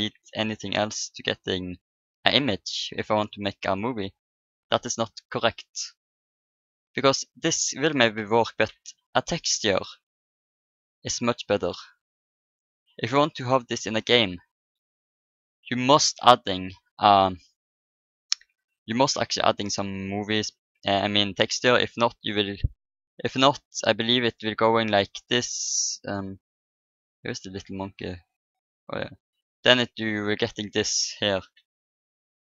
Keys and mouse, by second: 1.3-3.0 drag, 2.7-7.8 middle drag, 14.5-19.5 middle drag, 21.1-23.8 middle drag, 22.5 shift+a, 30.0-31.8 drag, 31.5 r.